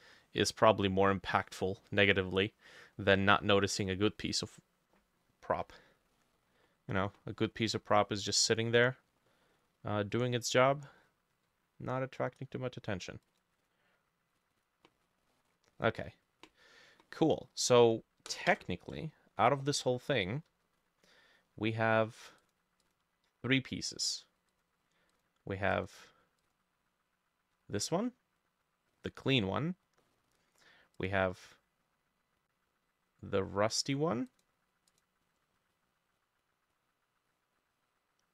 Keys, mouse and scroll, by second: 1.3 middle click, 5.7-6.2 scroll down 3, 6.2 middle click, 7.3 middle click, 7.9 middle click, 9.3 middle click, 9.6-10.1 scroll up 2, 10.2 middle click, 10.9-12.2 scroll up 1, 13.6 double click, 14.6 double click, 15.1-15.4 scroll down 1, 15.4 middle click, 16.7-17.0 scroll down 2, 17.0 middle click, 22.9 double click, 29.3-29.7 scroll down 1, 29.7 scroll up 1, 30.0 middle click.